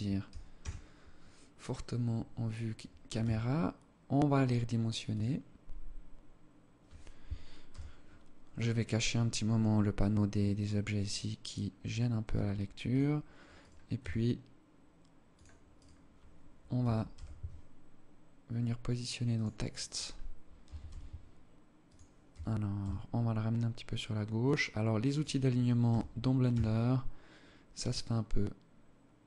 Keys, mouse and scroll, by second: 0.8-1.4 scroll up 1, 1.4 scroll down 1, 2.7 s, 4.8 scroll down 1, 7.0 t, 10.5 right click, 11.6 s, 13.0 right click, 13.4 s, 15.3 right click, 16.2 g, 19.2 right click, 20.0 g, 23.3 g, 24.5 right click, 25.2 g.